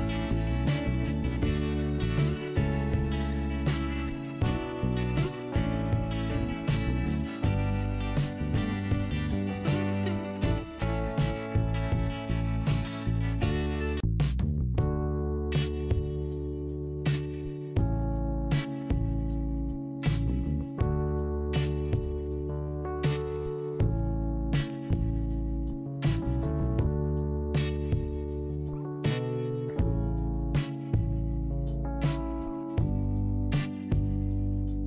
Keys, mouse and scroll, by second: 2.7 click, 2.8 click, 3.1 click, 3.2 double click, 3.3 double click, 3.4 double click, 3.5 double click, 3.7 double click, 3.8 double click, 4.2 double click, 4.3 double click, 5.3 double click, 7.9 click, 9.6 click, 12.6 right click, 13.1 click, 14.3 f, 14.8 scroll down 1, 15.6-17.2 scroll up 1, 17.2 click, 18.8 click, 21.2 scroll down 1, 21.9 click, 23.5 scroll down 1, 24.4 click, 25.3 scroll down 1, 26.5 scroll down 1, 27.5 click, 29.4-30.1 scroll down 1, 30.1 click, 30.3 click, 31.6 click, 32.7 Delete, 33.0 click, 34.2 click.